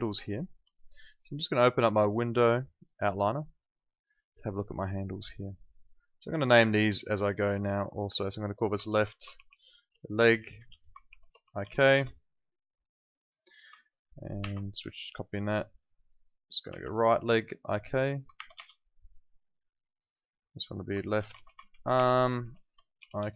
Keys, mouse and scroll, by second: 0.7 alt+click, 1.0 alt+middle click, 2.2 click, 8.9-12.1 typing, 13.2 click, 14.4 ctrl+c, 15.4 click, 17.3 click, 18.3 shift+r, 18.5 Return, 19.9 click, 21.0-23.3 typing.